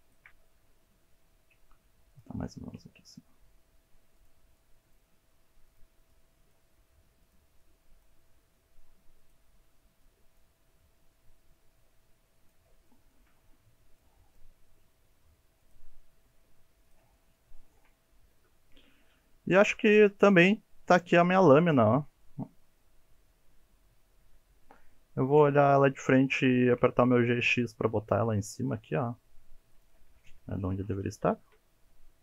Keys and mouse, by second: 0.4-3.7 typing, 0.9 click, 1.1 click, 1.6 click, 1.7 click, 2.1 click, 2.2 click, 2.7 click, 3.5 click, 4.3 click, 4.5 shift+middle click, 4.9 click, 5.0-8.3 typing, 5.4 click, 5.9 shift+middle click, 6.1 shift+middle click, 6.4 click, 6.9 shift+middle click, 7.2 shift+middle click, 7.3 click, 7.7 click, 7.8 shift+middle click, 8.1 click, 8.5 click, 8.6 shift+middle click, 8.9 shift+middle click, 9.1 click, 9.4 g, 9.8 click, 9.9 shift+middle click, 10.1 shift+middle click, 10.2 shift+middle click, 10.3 shift+middle click, 10.5 shift+middle click, 10.6 shift+middle click, 10.8 click, 11.2 click, 11.4 g, 12.0 click, 12.1 middle click, 12.3 middle click, 12.4 shift+middle click, 12.7 shift+middle click, 13.0 shift+middle click, 13.1 click, 13.3 g, 13.7 click, 13.8 g, 14.1 shift+middle click, 14.3 shift+middle click, 14.5 shift+middle click, 14.8 click, 15.0 g, 15.3 click, 15.4 shift+middle click, 15.6 shift+middle click, 15.7 shift+middle click, 15.9 click, 16.3 click, 16.3 g, 16.4 shift+middle click, 16.6 middle click, 16.9 click, 17.4 g, 17.6 middle click, 18.0 shift+middle click, 18.1 shift+middle click, 19.2 alt+z, 19.6 middle click, 19.9 Tab, 20.3-21.8 middle drag, 22.2-24.6 middle drag, 25.3 KP_1, 26.5 shift+middle drag, 27.0 g, 27.2 x, 29.7 click, 31.3 shift+middle click, 31.8 g, 31.9 x.